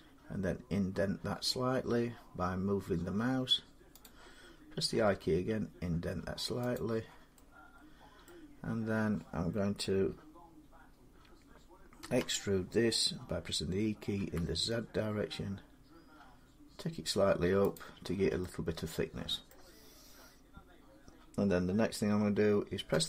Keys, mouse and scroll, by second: 3.8 click, 4.7 i, 6.6 click, 8.1-13.1 middle drag, 11.8 e, 14.0 z, 17.6-19.1 drag, 19.3 middle click, 22.7 x.